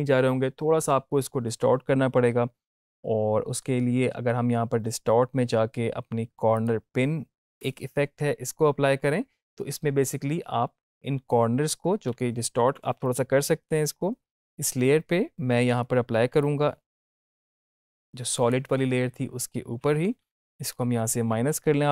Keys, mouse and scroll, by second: 5.6-6.4 scroll down 1, 6.5 click, 16.3-18.5 drag, 20.7 -.